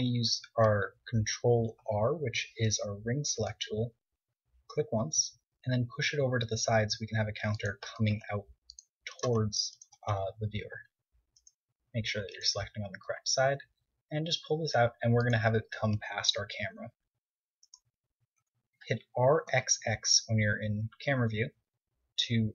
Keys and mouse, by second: 2.0 ctrl+r, 8.2-11.7 drag, 8.5 ctrl+Tab, 13.4 e, 14.3 click, 14.6-15.8 middle drag, 16.2 Tab, 16.8 KP_0, 18.0-19.8 right drag, 18.7 r, 19.8 click.